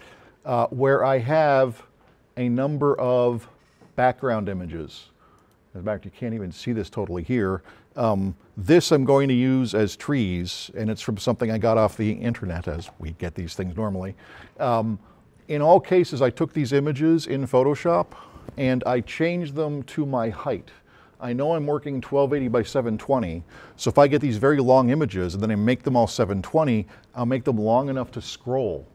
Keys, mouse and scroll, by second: 1.3 click, 3.0 click, 5.4 click.